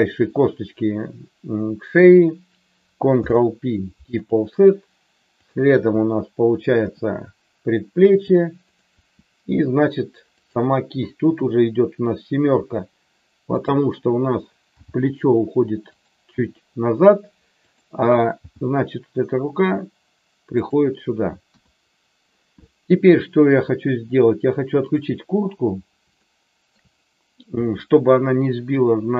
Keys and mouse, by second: 3.2 ctrl+p, 6.8 e, 8.7 click, 8.9 e, 11.3 KP_7, 13.4 click, 14.7 g, 17.5 click, 18.4 g, 21.4 KP_1, 26.2 shift+middle click, 27.5-29.1 middle drag.